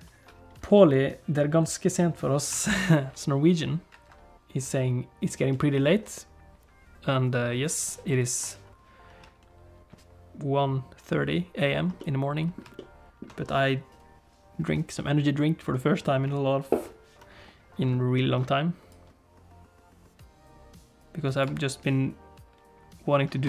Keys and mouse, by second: 11.9 middle click, 12.7 shift+middle click, 18.1 middle click, 18.9-21.5 drag, 21.5 space.